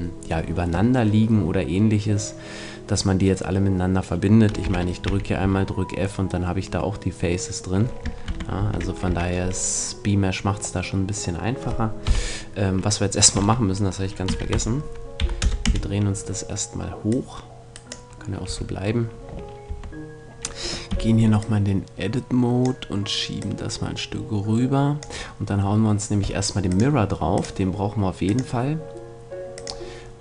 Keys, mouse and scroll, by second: 4.6 a, 5.1 f, 5.4 a, 6.3 middle click, 8.3 ctrl+z, 8.6 ctrl+z, 9.1 a, 9.3-11.9 middle drag, 12.1 KP_1, 13.3 Tab, 14.3 r, 17.1-18.8 drag, 18.5 a, 19.7 Tab, 20.9 b, 23.4-25.1 drag, 25.2 click, 26.7-29.3 drag, 29.5-30.2 drag.